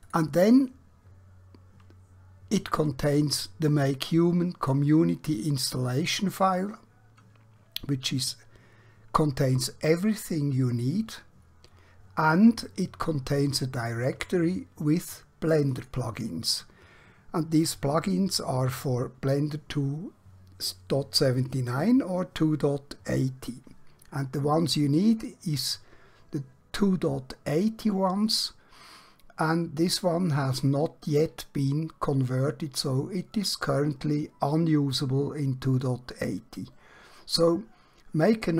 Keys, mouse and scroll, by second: 0.3 click, 15.5 click.